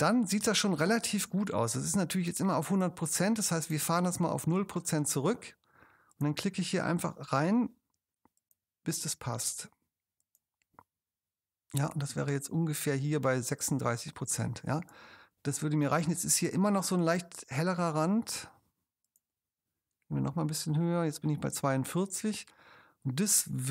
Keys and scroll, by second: 14.3 space, 21.6 space.